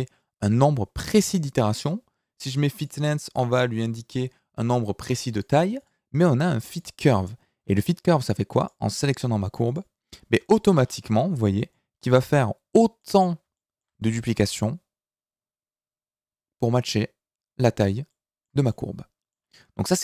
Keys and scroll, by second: 19.7 Tab.